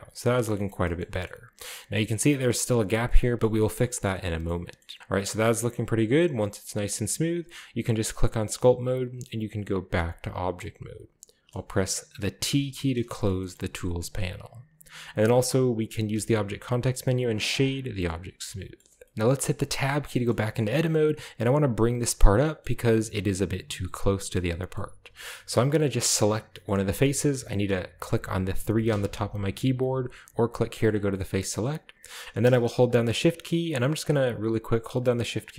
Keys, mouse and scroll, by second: 0.3 shift+middle click, 0.7 shift+middle click, 0.7-2.4 scroll up 4, 1.3 shift+middle click, 3.9-4.6 shift+scroll up 2, 4.1 shift+middle click, 4.6 middle click, 4.6 scroll down 1, 4.8 shift+middle click, 5.0 shift+click, 5.0-5.3 scroll up 1, 5.4 shift+click, 5.4 shift+middle click, 5.8 click, 5.8 middle click, 5.9 click, 5.9 middle click, 6.2-7.2 scroll down 2, 6.4-7.5 middle drag, 6.7 click, 8.4 click, 10.0 click, 10.5-11.1 drag, 11.5 middle click, 12.5 t, 13.3-14.4 shift+middle drag, 14.2-15.9 shift+scroll up 3, 16.1 w, 17.5 click, 17.9-18.8 scroll down 2, 18.1-18.6 middle drag, 18.8 middle click, 18.9 scroll up 1, 19.1 Tab, 19.8 Tab, 20.0-20.6 scroll down 1, 20.2-21.0 shift+middle drag, 20.6-21.3 shift+scroll up 1, 22.3-23.4 middle drag, 22.3-22.8 scroll down 1, 22.8-23.1 scroll up 1, 24.3-25.8 middle drag, 25.8 right click, 26.6-27.6 shift+middle drag, 28.9 3, 30.7-31.1 drag, 31.1 middle drag, 31.3-32.1 scroll up 2, 32.6 shift+right drag, 32.9 shift+right drag, 33.1 shift+right click, 33.5 shift+right drag, 33.7 shift+right drag, 34.0 shift+right drag, 34.4 shift+right drag, 34.7 shift+right drag, 35.0 shift+right drag, 35.3 shift+right click.